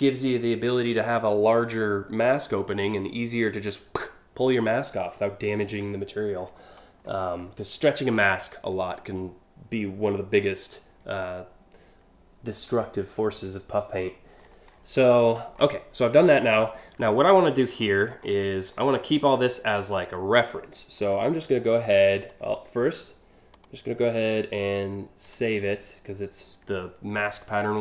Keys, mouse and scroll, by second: 6.2-6.8 scroll down 5, 12.1 scroll down 1, 12.5-13.0 scroll up 2, 13.7-14.7 scroll up 5, 14.8-15.3 scroll down 2, 17.0 scroll down 1, 17.4 scroll up 1, 17.5-18.0 scroll down 2, 18.4-19.0 scroll up 2, 20.6 right click, 21.8 click, 23.2 click, 24.9 click.